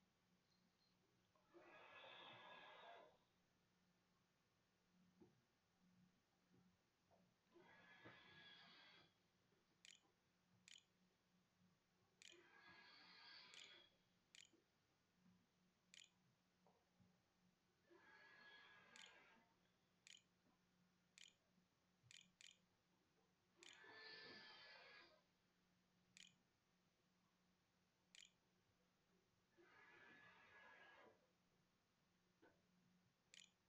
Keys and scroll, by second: 3.2 -, 7.9-10.9 typing, 12.0 Tab, 12.4-15.9 typing, 17.4-23.2 typing, 23.4 Tab, 26.1-29.5 typing, 31.8-33.6 typing.